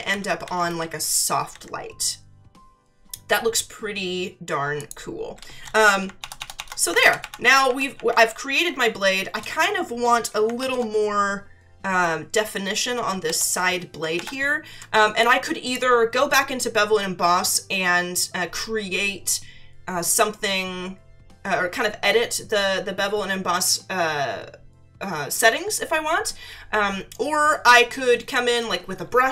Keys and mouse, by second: 4.8 click, 7.0 ctrl+=, 10.6 ctrl+-, 14.1 ctrl+=, 15.1 space, 15.2 click.